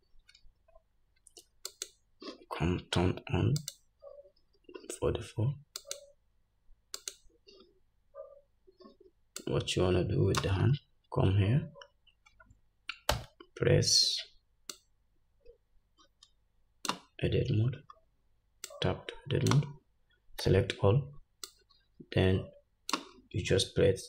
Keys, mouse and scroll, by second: 1.9 click, 3.8 click, 5.9 click, 7.1 click, 9.6-24.0 drag, 10.9 scroll up 2, 11.8-12.8 scroll down 1, 13.3 Tab, 18.0-18.8 scroll down 2, 20.6 a.